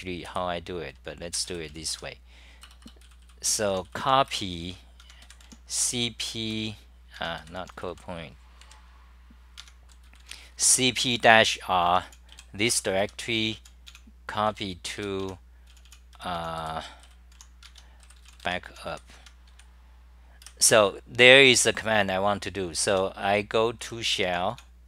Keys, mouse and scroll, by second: 0.3 [, 1.9-5.9 typing, 2.6 Return, 7.1-8.1 typing, 8.6 super+=, 9.6 Home, 9.8-10.7 typing, 11.8 Home, 12.0-17.8 typing, 12.7 Return, 19.1 Home, 19.5 ', 20.5 2, 22.9 j, 23.8 w.